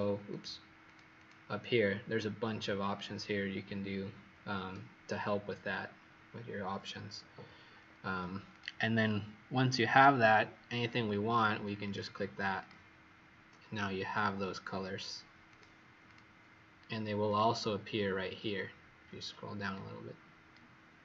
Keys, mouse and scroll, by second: 0.8 click, 1.1 click, 7.6 Escape, 8.4 click, 16.1 click, 17.2 click.